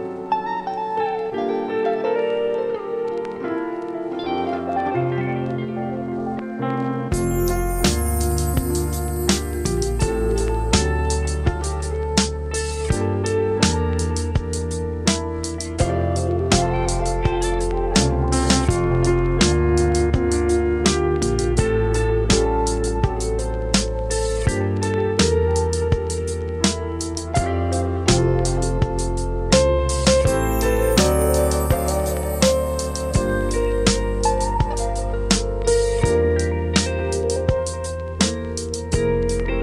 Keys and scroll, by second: 3.0 space, 8.3 space, 11.3 space.